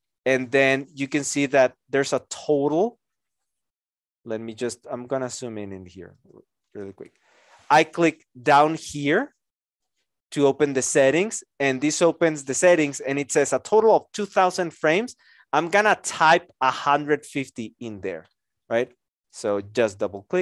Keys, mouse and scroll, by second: 20.3-20.4 typing.